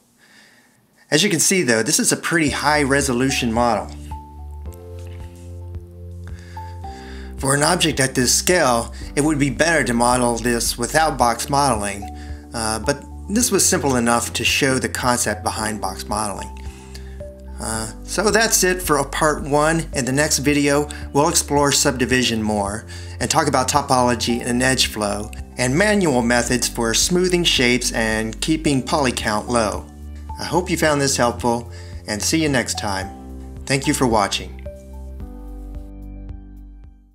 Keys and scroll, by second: 1.1 Escape.